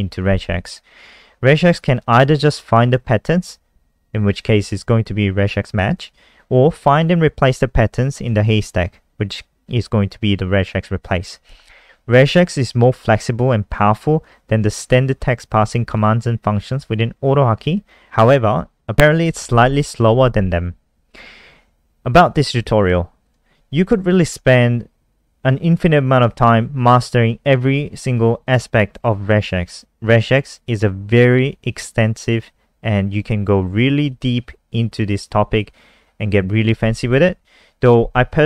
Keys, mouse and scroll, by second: 21.5 scroll down 2, 22.4 click.